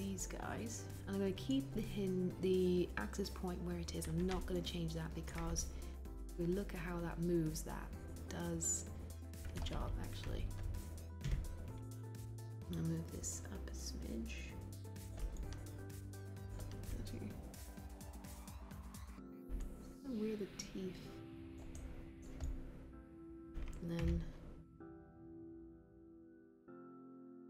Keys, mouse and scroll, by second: 11.2 w, 24.1 e.